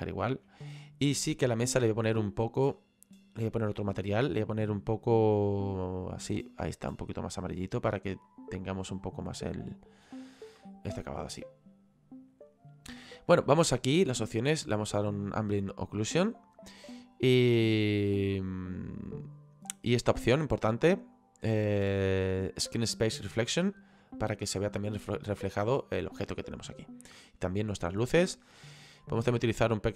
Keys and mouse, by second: 0.6 right click, 2.0 click, 13.6 click, 15.1 click, 18.7 click, 21.2 click, 23.4 click, 29.3 click.